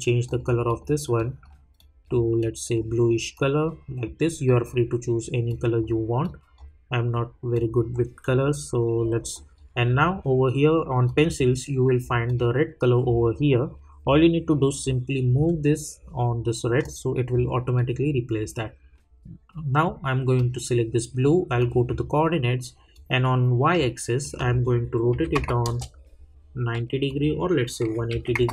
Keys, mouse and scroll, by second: 20.3 click, 25.6 Return, 27.0 click.